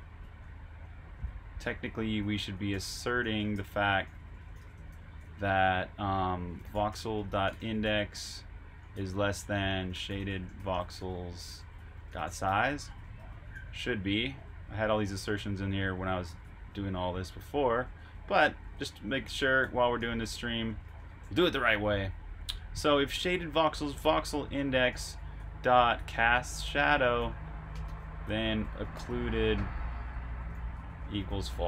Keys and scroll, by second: 6.3-13.3 typing, 19.7-20.4 typing, 22.8-23.5 typing, 24.5 Escape, 24.6-26.5 typing, 28.2-28.5 typing, 29.8-31.1 typing.